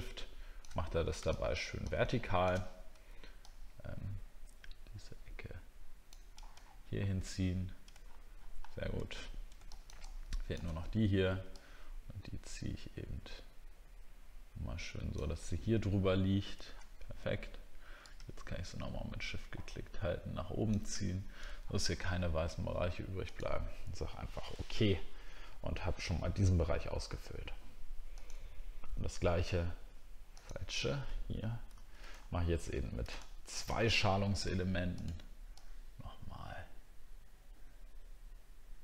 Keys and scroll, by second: 6.6-7.1 alt+scroll up 1, 8.0-8.4 alt+scroll down 1, 8.6 alt+scroll down 1, 21.9 alt+scroll down 1, 24.1 alt+scroll down 1, 32.1 alt+scroll up 1.